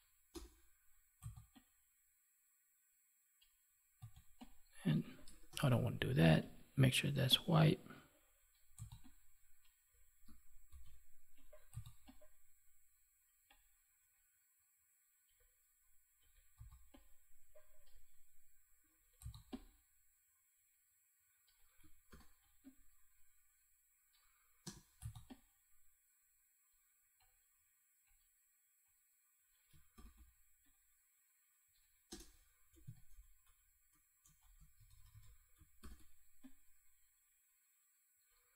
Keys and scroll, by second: 5.4 ctrl+z, 10.6 ctrl+z, 22.0 ctrl+t, 29.9 ctrl+t, 35.8 ctrl+t.